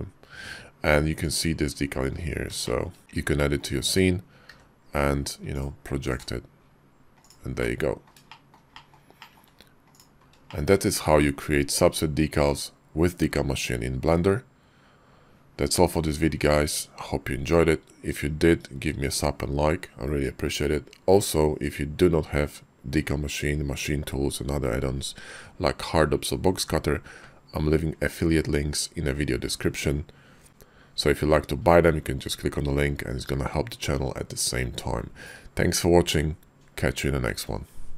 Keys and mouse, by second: 2.6 shift+click, 3.0 shift+click, 3.4 middle click, 4.5 d, 7.2 click, 7.6 middle click, 8.3 shift+click, 8.8 shift+click, 9.2 shift+click, 9.9 click, 10.5 shift+click.